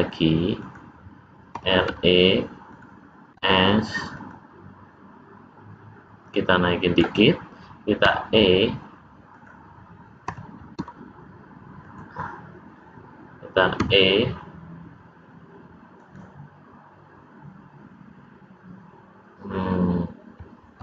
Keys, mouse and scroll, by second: 1.4 r, 3.2 s, 6.2 click, 8.0 e, 10.2 r, 13.7 e.